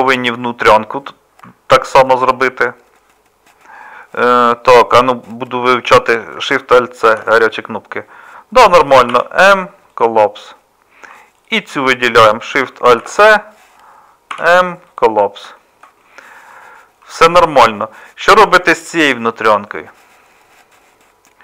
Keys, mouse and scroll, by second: 7.1 alt+shift+c, 9.1 m, 13.0 alt+shift+c, 14.3 m.